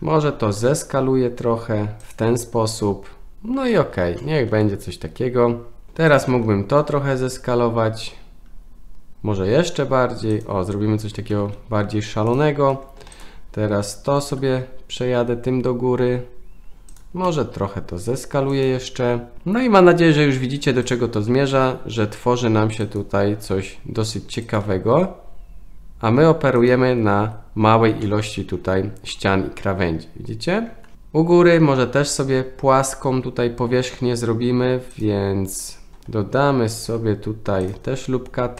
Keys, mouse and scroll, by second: 0.6 s, 4.2-4.5 shift+middle drag, 5.9 2, 6.1 alt+click, 6.8 s, 11.3 g, 13.1 alt+click, 14.1 g, 17.3 s, 21.6 s, 24.5 alt+click, 25.0 s, 27.2 Tab, 28.0-28.6 middle drag, 29.1-30.6 middle drag, 30.9 Tab, 30.9 KP_1, 36.7 ctrl+r.